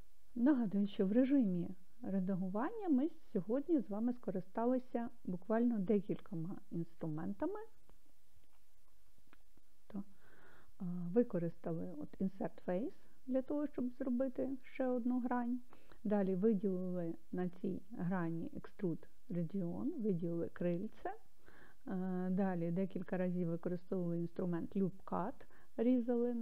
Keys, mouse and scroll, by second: 0.8-2.5 drag, 9.3 click.